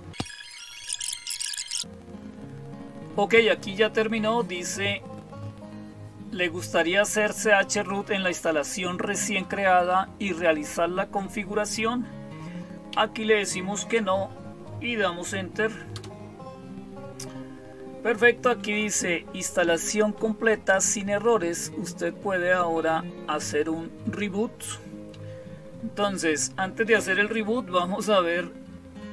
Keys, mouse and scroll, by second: 12.8 Down, 15.8 Return.